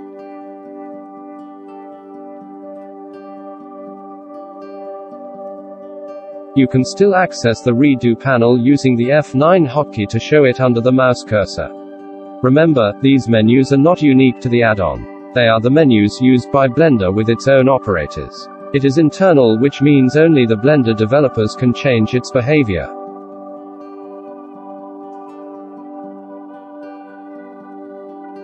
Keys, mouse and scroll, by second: 1.8 middle click, 2.6-3.8 shift+middle drag, 9.5 F9, 14.6-15.6 middle drag, 16.0 ctrl+z, 16.5 shift+q, 23.7 ctrl+z, 24.7 F4.